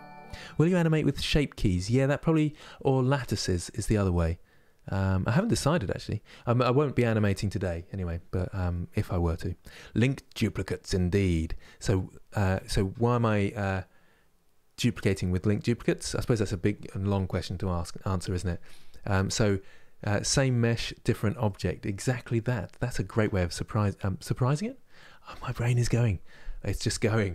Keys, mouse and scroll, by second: 17.2-21.9 middle drag, 21.9-25.0 scroll up 2.